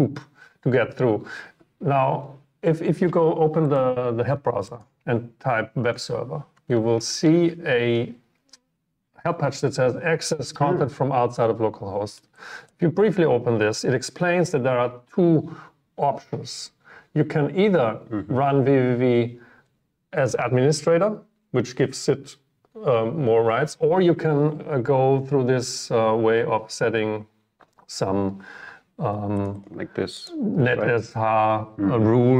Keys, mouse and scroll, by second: 12.7 click, 29.5 click, 29.6 click.